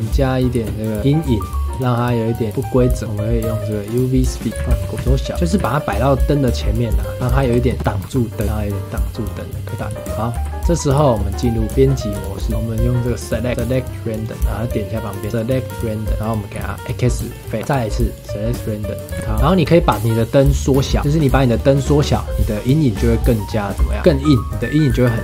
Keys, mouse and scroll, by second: 0.5 space, 1.0 click, 1.7 shift+a, 4.5 g, 4.6 g, 5.0 s, 5.3 g, 7.4 Right, 7.7 KP_0, 8.0 g, 9.6 s, 9.9-10.3 shift+middle drag, 10.3 s, 11.0 shift+middle click, 11.7 Tab, 12.2 shift+middle click, 12.5 3, 13.1-14.2 drag, 15.0-16.5 drag, 16.5 x, 17.6-19.1 drag, 19.1 x, 19.2 g, 20.7 click, 21.0 s, 21.5 click, 23.7 s.